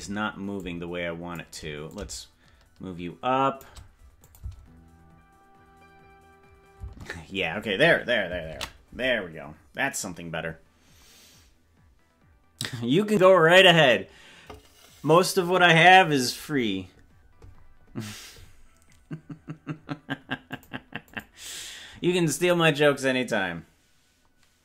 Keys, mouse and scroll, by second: 0.6 shift+click, 2.0-3.7 shift+drag, 4.3 click, 4.6 space, 6.9 space, 11.9 ctrl+s.